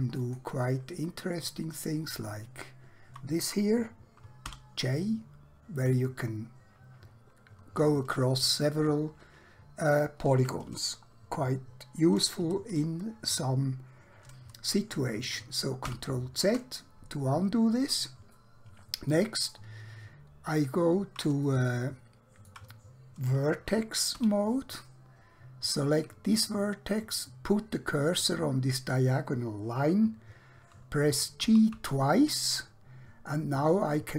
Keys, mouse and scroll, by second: 0.1 click, 2.1 shift+click, 4.5 j, 14.7 ctrl+Num_Lock, 15.9 ctrl+z, 18.4 middle click, 20.3-21.4 scroll up 1, 21.7 shift+middle click, 24.1 1, 25.7 click, 31.5 g, 31.8 g.